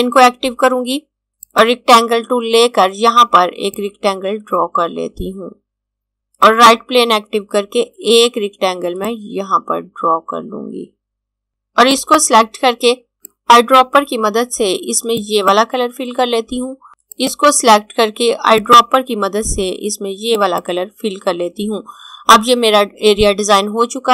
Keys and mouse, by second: 6.5 click, 9.1 click, 11.9 click.